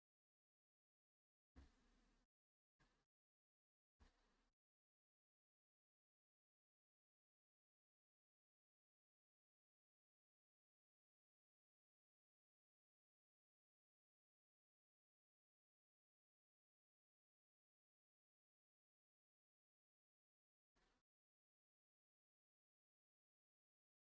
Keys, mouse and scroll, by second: 0.0 click, 3.1 click, 4.9 click, 5.6 middle click, 5.6-6.6 scroll, 5.9 middle click, 6.6 scroll up 1, 8.1 click, 9.9 click, 12.2 click, 15.1 click, 17.5 click, 18.0 click, 18.5 ctrl+click, 20.7 click, 23.6 click.